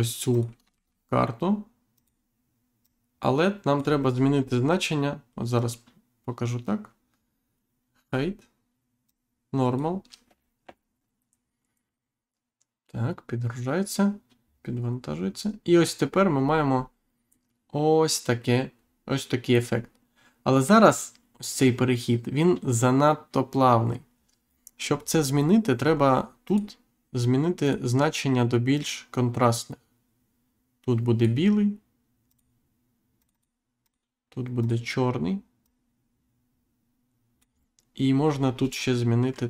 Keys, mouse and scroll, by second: 0.3 click, 0.7 shift+d, 1.9 click, 2.8 click, 4.0-4.4 scroll up 2, 5.5 click, 9.0 click, 16.4-17.1 scroll down 1, 18.8-19.2 scroll down 1, 19.6-20.0 scroll up 1, 24.1 scroll up 1, 25.0 scroll down 1, 25.8 scroll up 1, 26.4 click, 27.6 click, 28.7 click, 32.3 click, 33.2 click, 33.8 click, 34.6 click, 35.6 click, 38.2 scroll up 1.